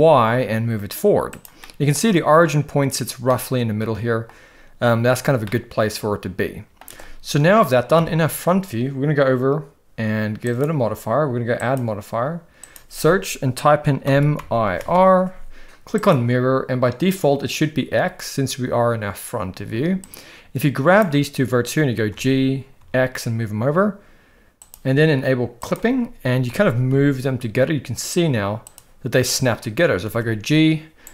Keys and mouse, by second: 1.6 middle click, 3.3-4.3 middle drag, 5.4-6.7 middle drag, 7.9 KP_1, 10.4 click, 11.7-16.1 drag, 20.1 click, 22.1 g, 26.4 g, 30.0 g.